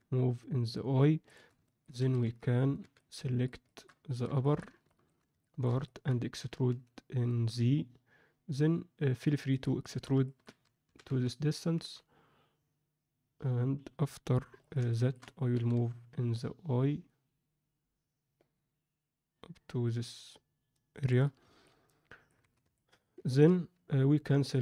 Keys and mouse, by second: 1.6 shift+middle click, 1.9 a, 2.8 alt+a, 2.8 b, 3.6 shift+middle click, 4.0 ctrl+alt+middle click, 4.4 shift+middle click, 4.8 ctrl+alt+middle click, 5.4 alt+shift+middle click, 5.8 ctrl+alt+middle click, 6.4 e, 9.8 alt+shift+middle click, 10.2 ctrl+middle click, 10.8 e, 14.8 alt+shift+middle click, 15.5 g, 21.6 middle click, 22.6 alt+z, 22.7 middle click, 23.2 ctrl+middle click.